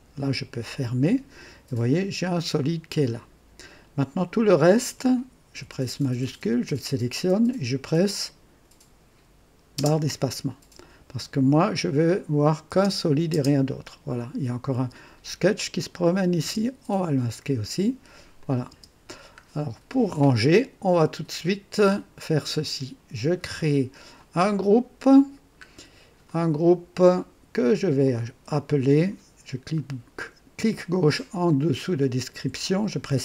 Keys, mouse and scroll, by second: 0.7 click, 4.1 click, 6.2 shift+click, 9.7 space, 11.9 click, 12.7 space, 13.3 space, 14.7 space, 15.9 click, 16.4 space, 17.5-17.9 scroll down 1, 18.4 click, 18.7 space, 19.3 scroll up 1, 20.2 scroll up 1, 20.8 scroll down 1, 24.1 click, 25.2 scroll down 1, 26.2 click, 28.0 click, 31.7 click, 32.4 F2.